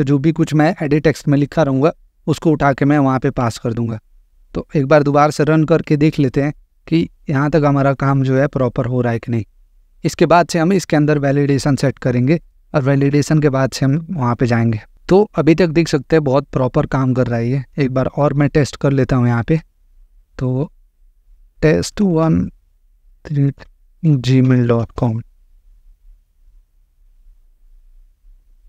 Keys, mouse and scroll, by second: 3.4 click, 18.6 click, 20.8-24.8 typing, 26.4 click.